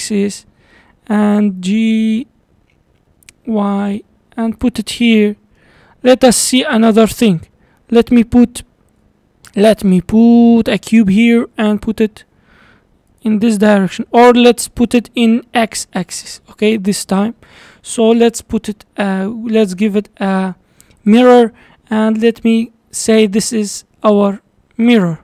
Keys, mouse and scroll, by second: 1.2 g, 5.1-6.3 middle drag, 6.3 scroll up 4, 6.6-8.1 shift+middle drag, 8.1 shift+right click, 8.8 shift+a, 11.6 g, 14.2 ctrl+z, 15.0 g, 16.3-17.1 middle drag, 17.1 scroll up 2, 21.1 drag, 22.3 click, 24.1 click.